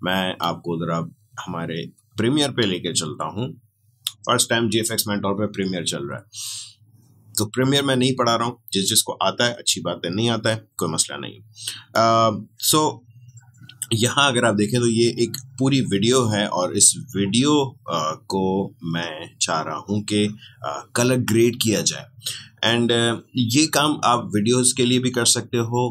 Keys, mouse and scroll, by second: 0.1 click, 0.4 alt+Tab, 11.9-25.9 drag.